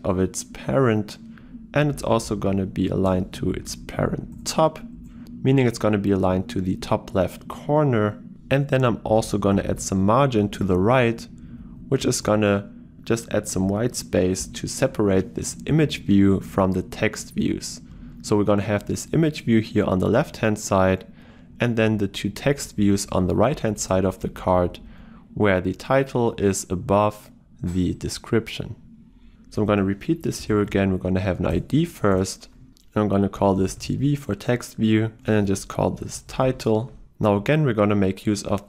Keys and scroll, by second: 4.4 Return, 12.3 Return, 31.6 Return.